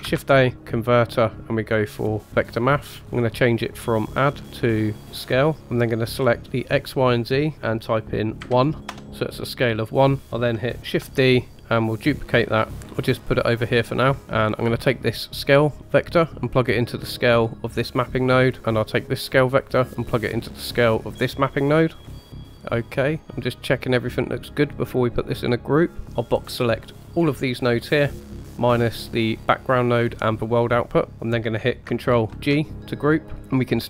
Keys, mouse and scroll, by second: 0.0 shift+a, 3.1-3.4 scroll up 2, 3.4 middle click, 4.4-5.2 drag, 5.9-8.9 drag, 10.2 click, 11.0 shift+d, 12.7-14.2 drag, 14.2 middle click, 14.2 scroll up 2, 15.9-17.1 drag, 17.3 middle click, 18.4 middle click, 19.8-20.6 drag, 21.6 click, 22.0-22.3 scroll down 2, 22.1 click, 22.1 middle click, 22.5 middle click, 26.0 scroll down 1, 26.2-28.1 drag, 28.2 middle click, 28.7-29.9 scroll up 1, 29.9-30.9 scroll up 1, 30.9 middle click, 31.1-31.8 scroll down 3, 32.3 ctrl+g, 33.4 middle click.